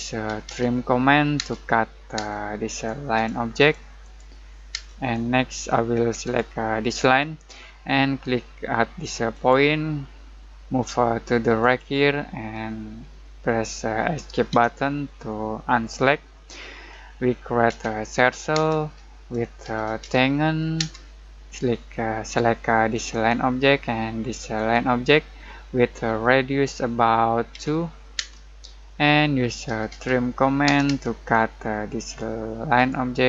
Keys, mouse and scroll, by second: 0.0-1.3 typing, 2.7 click, 4.7 space, 5.1 middle click, 5.5 scroll up 1, 6.2 click, 9.3 click, 11.6 click, 14.5 Escape, 16.0-17.6 middle drag, 17.6-20.7 typing, 22.9 click, 27.5 2, 28.1 space, 29.4-30.6 typing, 31.2-32.7 scroll up 1, 32.7 click.